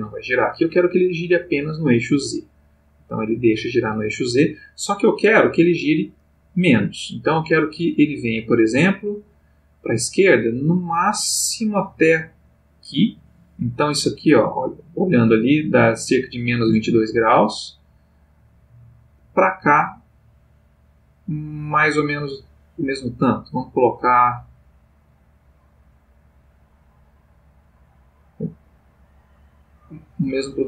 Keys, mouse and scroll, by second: 2.6-6.2 drag, 5.5 Escape, 6.7-30.6 drag.